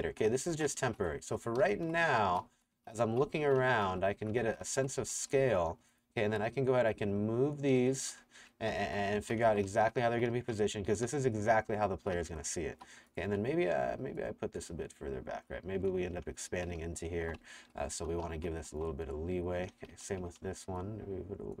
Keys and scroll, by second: 0.0-5.9 typing, 8.4 Escape, 8.5-13.3 typing, 16.2 Escape, 16.5-19.9 typing.